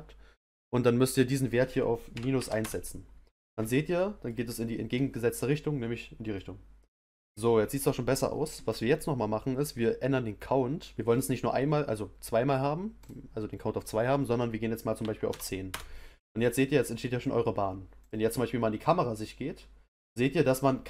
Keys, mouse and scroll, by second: 0.3-3.3 drag, 3.9-5.9 middle drag, 5.9 scroll up 1, 6.3-9.3 middle drag, 13.0-16.0 drag, 18.0 click.